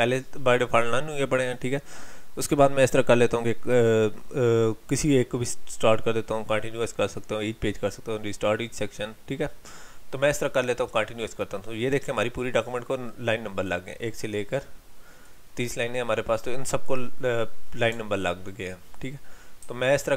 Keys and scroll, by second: 19.6 ctrl+h.